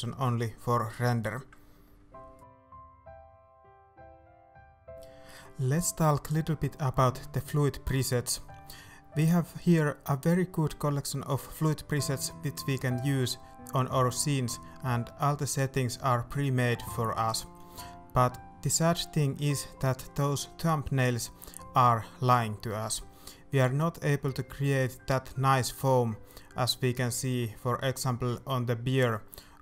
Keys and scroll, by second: 0.1 alt+a, 1.6 alt+a, 2.5 alt+a, 3.5 alt+a.